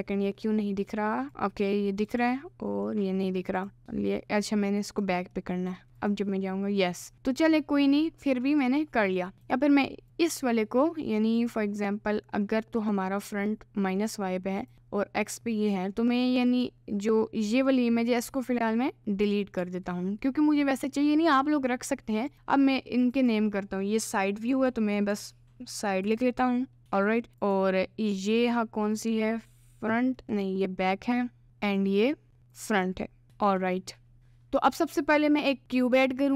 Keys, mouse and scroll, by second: 2.1 click, 2.9 middle click, 3.8 middle click, 4.9 click, 5.4 middle click, 6.0 click, 8.5 middle click, 9.2 middle click, 9.4 click, 11.4 click, 14.6 click, 15.7 middle click, 16.5 click, 18.3-19.6 middle drag, 19.6 Delete, 20.3 middle click, 23.0 click, 23.3-27.3 drag, 28.9 click, 30.2 middle click, 31.7 click, 32.5 click, 32.8 click, 34.7 shift+a.